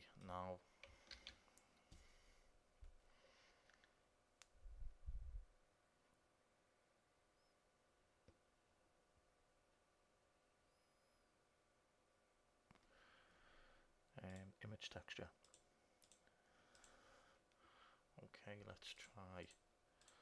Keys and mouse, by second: 1.4 shift+a, 16.2-18.9 drag, 19.1-20.2 drag.